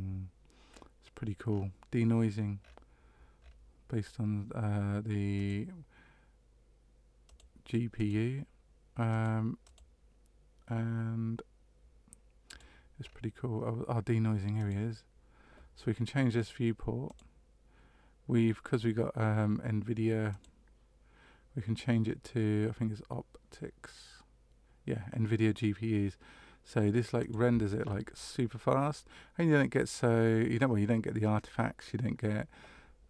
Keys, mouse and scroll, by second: 0.7-1.5 scroll down 2, 1.5-2.6 scroll down 5, 2.6-3.4 scroll up 2, 3.4-4.5 scroll up 5, 5.3 click, 7.2 click, 7.9 click, 9.1 click, 9.6 click, 12.4 click, 13.0-14.5 scroll up 1, 14.5 click, 14.5-15.5 scroll up 2, 17.6 click, 20.3 click.